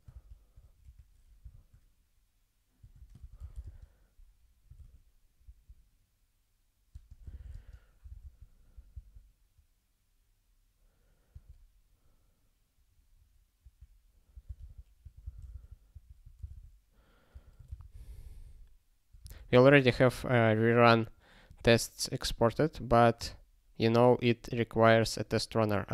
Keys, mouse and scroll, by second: 0.2 u, 0.8 BackSpace, 2.8 Delete, 2.9-5.4 typing, 7.0-8.9 typing, 11.3 -, 13.6-17.3 typing, 16.7 ctrl+s, 17.9 ctrl+s.